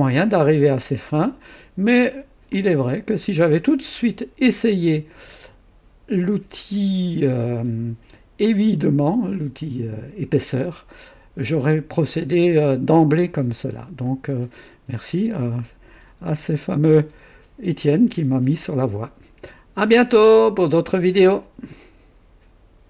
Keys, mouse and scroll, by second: 0.8-2.1 drag, 2.5-7.4 drag, 15.2-18.0 drag, 21.5 right click, 22.8 click.